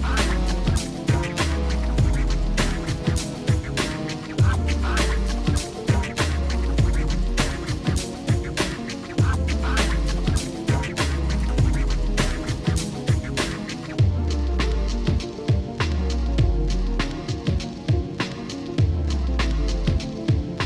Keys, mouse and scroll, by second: 0.3 middle click, 0.8 scroll up 1, 1.3-3.5 shift+middle drag, 4.8 ctrl+s, 5.6 shift+middle click, 6.9 shift+middle click, 8.7 shift+middle click, 11.4 KP_Divide, 12.4 shift+middle click, 13.5 middle click, 14.2 scroll up 1, 14.7-20.6 shift+middle drag.